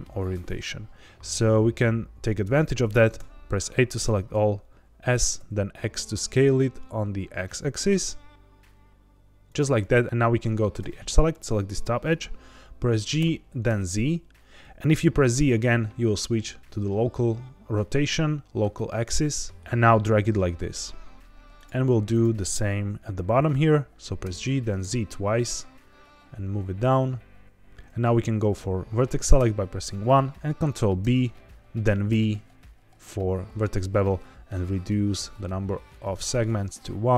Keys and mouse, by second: 3.1 a, 4.6 s, 5.3 x, 9.4 click, 10.7 2, 11.2 click, 13.1 g, 13.6 z, 15.3 z, 21.5 click, 22.1 click, 24.2 g, 24.4 z, 24.7 z, 27.7 1, 27.7 2, 29.3 1, 31.0 ctrl+b, 32.0 v.